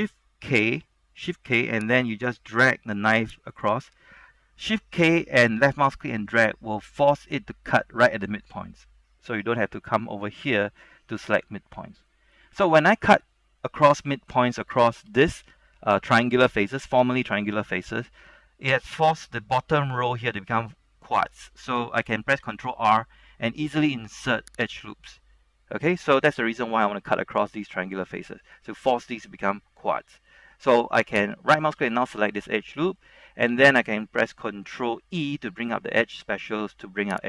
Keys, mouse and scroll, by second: 0.6-1.2 shift+k, 1.2 shift+k, 1.5 shift+k, 1.7 shift+k, 4.9 shift+k, 12.2 middle click, 13.1-13.9 scroll up 1, 13.9 shift+middle click, 14.9 shift+z, 15.2 shift+middle click, 22.5 ctrl+r, 23.4-23.9 scroll up 1, 23.9 scroll down 1, 24.1-24.9 scroll up 1, 24.9 right click, 26.1 middle click, 27.9-29.0 shift+middle drag, 31.6 alt+right click, 31.9-33.0 middle drag, 33.0 middle click, 33.1 scroll up 1, 33.4 shift+middle click, 35.8 ctrl+e.